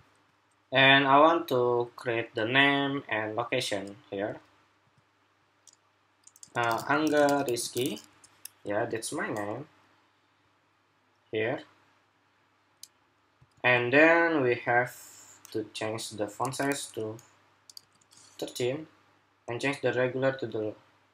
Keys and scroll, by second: 7.8 Escape, 8.5 ctrl+c, 13.3 super+d.